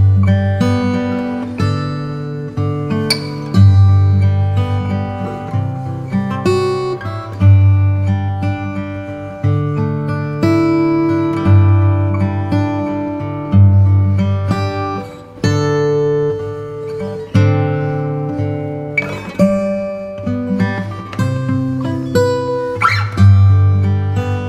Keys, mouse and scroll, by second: 6.5-9.6 middle drag, 9.6-10.7 drag, 11.7 click, 11.7 ctrl+l, 13.4-14.8 drag, 14.8-16.0 middle drag, 19.2-20.3 middle drag, 20.3-22.0 shift+drag, 21.4 ctrl+p, 21.4 ctrl+p, 22.2-23.9 drag, 23.4 g.